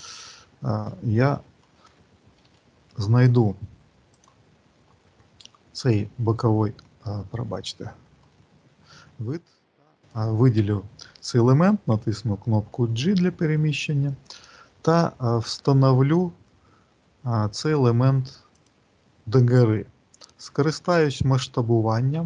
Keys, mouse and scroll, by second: 0.8 shift+middle click, 2.3 q, 3.2 click, 5.1 click, 5.1-6.1 scroll up 2, 6.1 middle click, 6.1-7.2 scroll up 2, 7.6 alt+middle click, 8.1 alt+middle click, 9.8 click, 11.7 g.